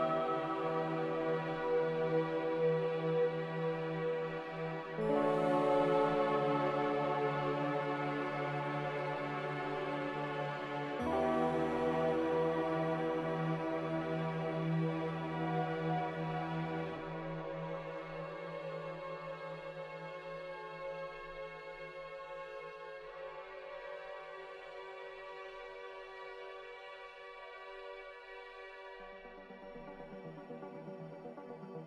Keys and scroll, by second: 26.4 ctrl+c, 29.4 ctrl+v.